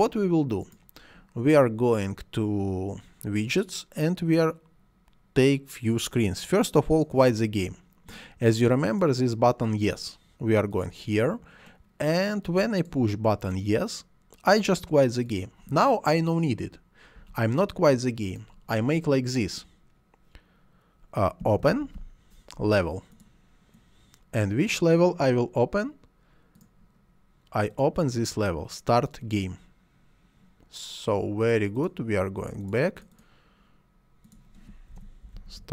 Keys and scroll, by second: 17.2 Delete, 21.2-22.3 typing, 34.6-35.7 typing.